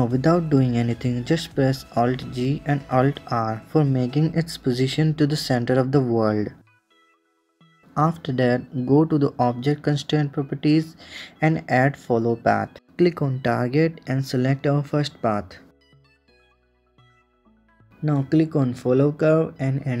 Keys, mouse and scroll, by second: 0.8-2.3 middle drag, 2.3 alt+g, 3.5 alt+r, 4.7-7.0 middle drag, 9.8 click, 10.7-12.9 drag, 14.6-16.7 drag, 18.3 click, 19.3-20.0 drag.